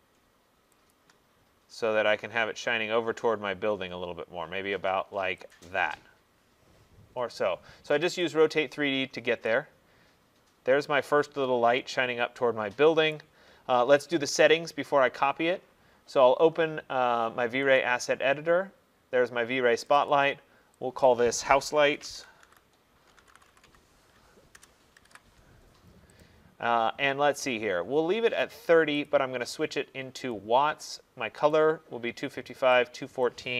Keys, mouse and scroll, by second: 0.0 shift+click, 1.0 click, 5.6 click, 8.1 click, 8.3 click, 8.7 middle click, 8.8 middle click, 9.6 middle click, 13.2 right click, 17.8 click, 19.9 click, 20.1 click, 21.1 click, 21.8-25.1 typing, 26.2 click, 29.1 click, 30.4 click, 31.6 click, 33.3 click.